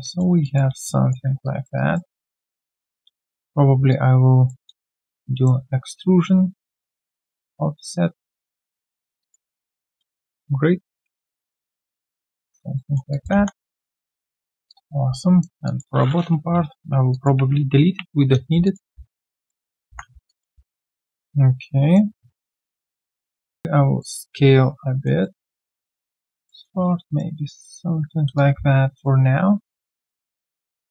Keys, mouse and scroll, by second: 0.0 alt+middle click, 0.4 alt+click, 0.7 q, 0.8 right click, 1.4 alt+click, 1.7 alt+right click, 3.7 right click, 4.7 Tab, 4.7 shift+right click, 9.2 alt+click, 9.4 alt+right click, 9.8 alt+middle click, 9.9 typing, 12.1 alt+click, 12.7 alt+middle click, 13.1 alt+click, 13.3 3, 13.9 right click, 14.4 scroll down 2, 14.7 alt+click, 15.1 alt+right click, 17.1 ctrl+click, 17.8 Delete, 18.6 alt+click, 19.0 right click, 19.0 q, 19.5 alt+middle click, 19.9 alt+1, 20.2 alt+click, 21.5 right click, 22.1-22.5 scroll down 1, 22.5 scroll, 22.8 right click, 23.3 w, 24.2-24.7 alt+scroll down 1, 24.7 alt+middle click, 24.9 alt+scroll down 1, 25.9 alt+middle click, 26.9 right click, 28.3 alt+click, 30.1 alt+click.